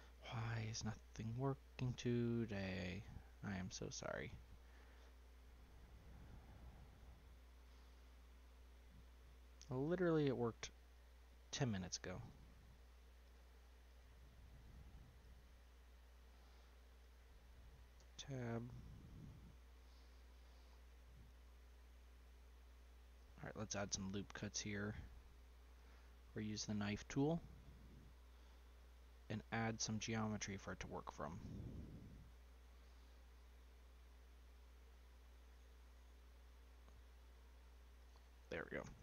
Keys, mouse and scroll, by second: 0.0 ctrl+z, 0.6-2.4 middle drag, 2.4-2.8 scroll up 3, 2.8-4.9 shift+middle drag, 4.9-5.2 scroll down 2, 5.2-6.0 middle drag, 6.0-6.5 scroll up 5, 6.5-8.7 middle drag, 8.7-9.9 scroll down 1, 9.9 click, 10.9 click, 12.2 click, 12.8 click, 13.2 click, 13.8 click, 15.2 click, 16.1-16.9 scroll down 2, 16.9 click, 17.9 Tab, 18.5 middle click, 18.9-19.7 scroll down 3, 19.7-23.0 middle drag, 23.1 click, 23.7-25.7 middle drag, 25.7-26.9 drag, 28.7-31.7 drag.